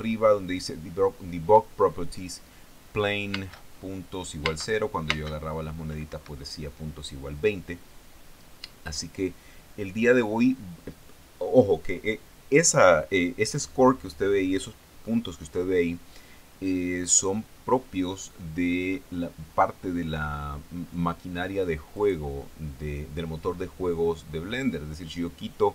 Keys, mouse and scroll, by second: 3.8 space, 4.9 space, 6.5 Escape, 22.4 click.